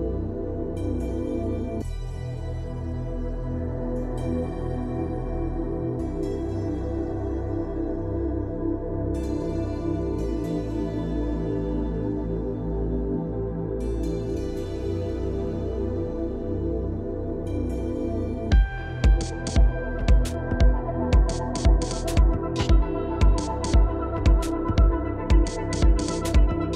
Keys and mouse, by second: 0.1 ], 2.6 click, 2.8 [, 3.0 [, 3.2 click, 4.1 click, 4.6 [, 4.9 [, 5.3 middle click, 5.7 ], 5.8 click, 6.4 click, 6.5 middle click, 7.6 ], 7.7 click, 8.5 click, 8.7 middle click, 9.4 shift+middle click, 9.7 middle click, 10.7 click, 11.9 shift+middle click, 13.2 click, 14.1-14.6 drag, 15.8 middle click, 17.3 /, 17.7 /, 20.3 ctrl+[, 20.5 ctrl+z, 22.8 ctrl+z, 23.2 ctrl+z, 25.2 ctrl+z, 25.3 ctrl+z, 26.1 ctrl+z, 26.1 [, 26.7 ctrl+z, 26.7 ].